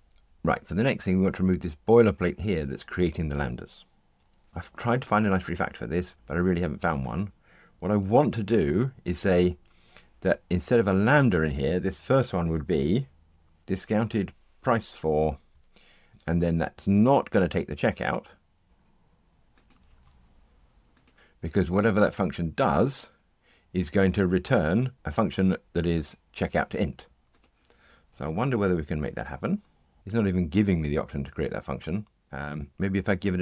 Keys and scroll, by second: 8.0 super+d, 14.6 Tab, 18.6 super+c, 29.0 alt+Return.